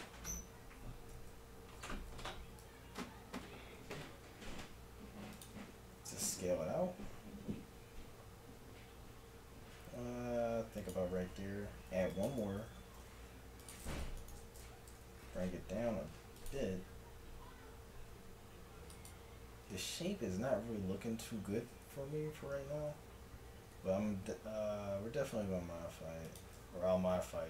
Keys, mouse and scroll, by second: 1.1 middle click, 2.7 e, 5.7-9.2 drag, 6.0 s, 11.9 ctrl+r, 13.0 g, 14.3-16.9 drag, 14.9 g, 16.9 s, 22.9 e, 26.7-27.4 middle drag.